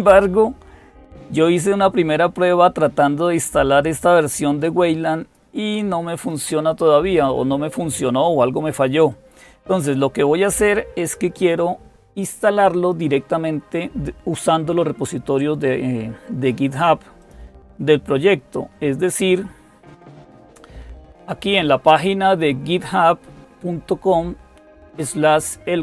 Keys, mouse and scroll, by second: 6.0-7.0 drag, 8.9-10.3 drag, 17.0 click.